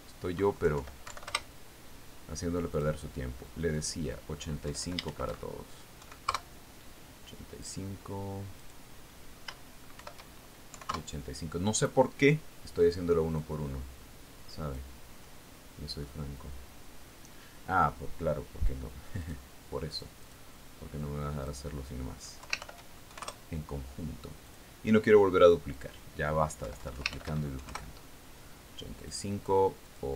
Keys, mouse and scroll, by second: 1.2 click, 2.1 BackSpace, 2.5 Delete, 2.8 Return, 4.2 click, 5.2 click, 6.1 Left, 6.6 shift+End, 7.5 KP_5, 7.7 KP_Enter, 9.1 click, 10.1 click, 11.5 shift+End, 12.2 KP_5, 12.4 KP_Enter, 13.4-14.7 middle drag, 14.7 scroll up 1, 14.8-16.4 drag, 16.4-17.5 scroll up 1, 20.7 click, 21.4 click, 22.9 click, 23.9 Left, 24.1 shift+End, 24.6 shift+KP_5, 24.7 shift+KP_Enter, 25.9 click, 27.2 click, 28.1 Left, 28.6 shift+End, 29.0 shift+KP_5, 29.1 shift+KP_Enter.